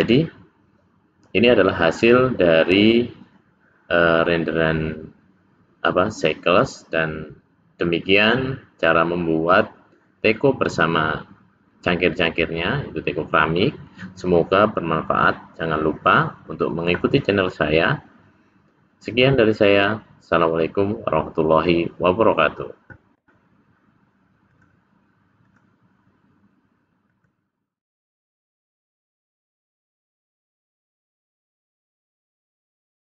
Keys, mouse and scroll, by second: 24.5 click, 26.2 click.